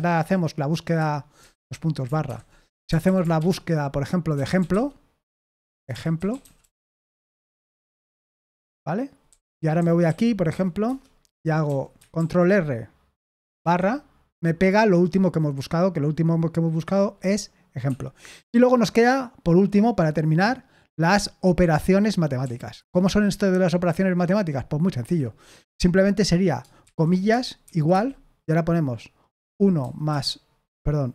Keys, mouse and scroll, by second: 0.9 Escape, 1.5-7.9 typing, 9.0-11.6 typing, 12.1 ctrl+r, 13.6 /, 17.8 Escape, 22.4 o, 22.7 Return, 25.0 Escape, 29.4 1.